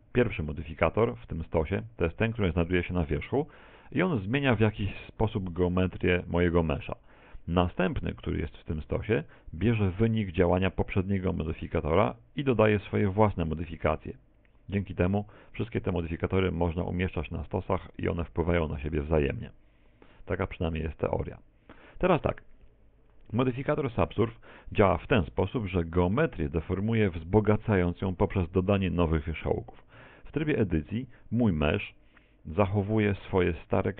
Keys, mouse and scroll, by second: 4.3 click, 8.8 click, 15.9 click, 21.1 click, 30.0 Tab, 31.5-31.9 scroll up 6, 33.1 right click.